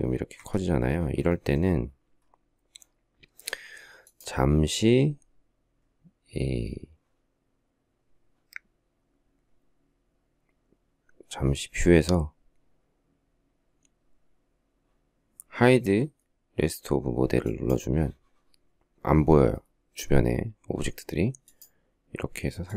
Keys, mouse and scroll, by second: 0.1 Escape.